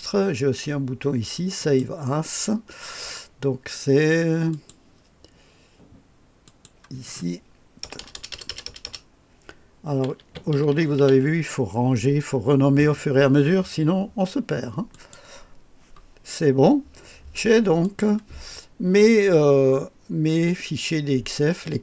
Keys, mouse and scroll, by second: 17.6 click.